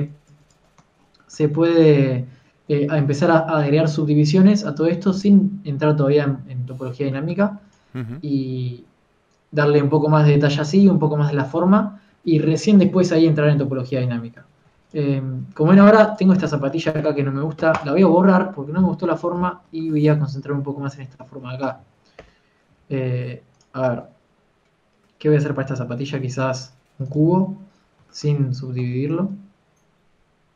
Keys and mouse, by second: 1.4 click, 2.1 Tab, 2.6 Tab, 7.4 a, 8.6 ctrl+s, 15.8 ctrl+s, 18.5 x, 23.4-24.7 typing, 29.7 Tab, 30.3 middle click.